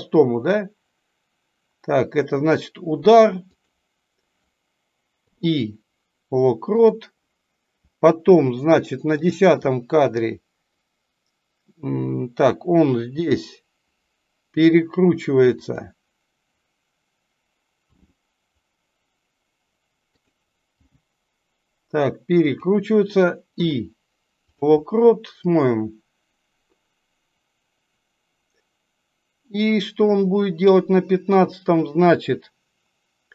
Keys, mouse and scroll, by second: 9.1 click, 25.5-30.6 drag.